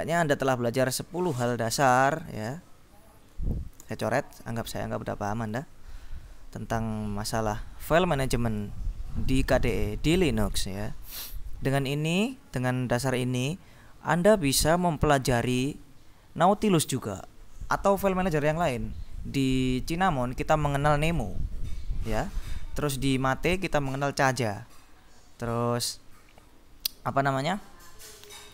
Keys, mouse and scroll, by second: 1.3 click, 2.5 ctrl+b, 3.9 ctrl+s, 4.5 click, 5.6-7.4 drag, 8.5 click, 9.4-10.5 drag.